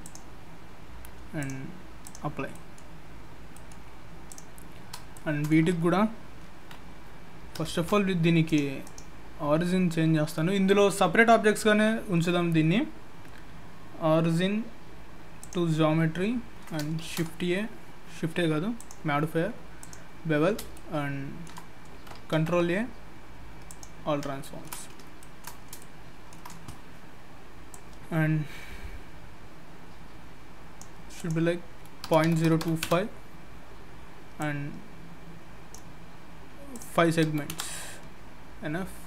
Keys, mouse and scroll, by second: 0.0 click, 1.4 click, 2.5 middle click, 4.3 click, 4.8-5.1 scroll up 3, 5.1 shift+middle click, 7.7 shift+s, 8.8 right click, 16.0-16.8 scroll down 1, 16.8 scroll down 2, 17.0 shift+a, 18.8 click, 20.3 scroll up 2, 20.7 shift+middle click, 22.3 ctrl+a, 24.3-25.7 shift+scroll up 6, 24.4 shift+middle click, 25.2 shift+middle click, 25.8 shift+middle click, 27.7 click, 31.2 click, 34.4 click, 36.7 click, 38.1-38.5 scroll down 2.